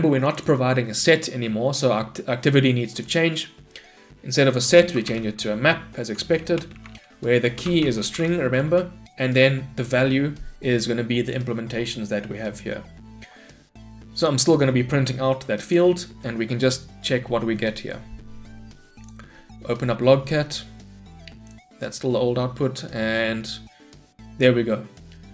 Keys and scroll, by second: 6.5 Return, 15.8 shift+F10.